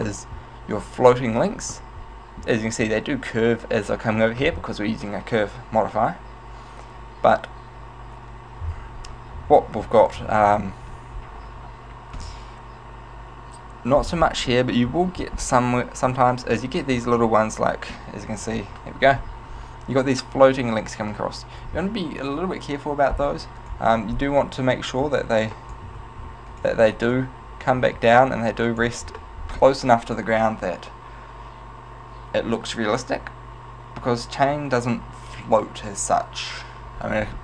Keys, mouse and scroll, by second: 0.4 scroll up 1, 1.9 middle click, 14.5 middle click, 15.7 middle click, 18.3 middle click, 18.3 KP_1, 23.7 right click, 24.8 click, 26.2 ctrl+z, 26.6 right click, 27.2 click.